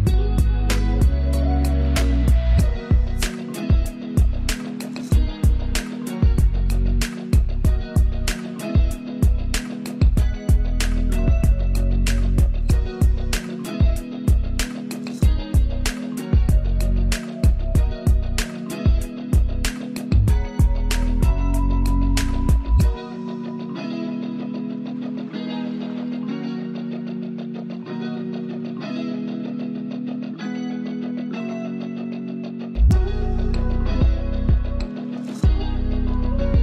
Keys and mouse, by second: 1.8 ctrl+z, 3.5 ctrl+e, 4.6-9.2 alt+drag, 9.2-10.5 shift+drag, 12.3 ctrl+t, 14.5 click, 17.9 ctrl+t, 19.0 right click, 20.3-23.1 drag, 23.1 Return, 24.6 ctrl+[, 26.8 Up, 27.3 Left, 30.1-33.9 alt+drag, 34.8 ctrl+space, 35.1 ctrl+click, 35.3 ctrl+space, 36.5 ctrl+alt+click.